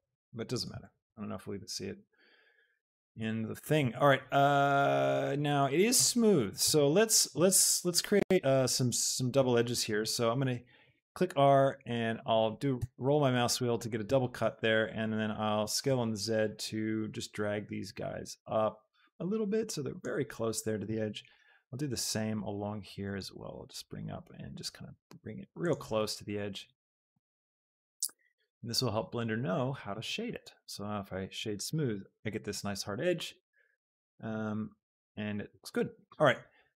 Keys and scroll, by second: 1.7 shift+Tab, 3.2 Tab, 6.8 Tab, 12.7 Escape, 15.7 shift+s, 16.0 z, 21.5 ctrl+r, 27.4 ctrl+r, 30.3 Tab.